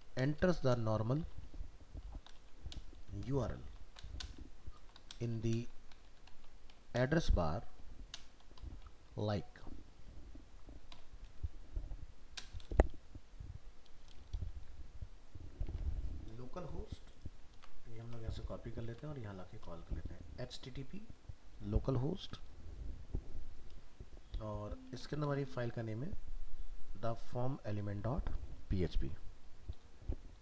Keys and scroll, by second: 15.7 alt+Tab, 17.5 ctrl+c, 18.0 alt+Tab, 18.9 ctrl+v.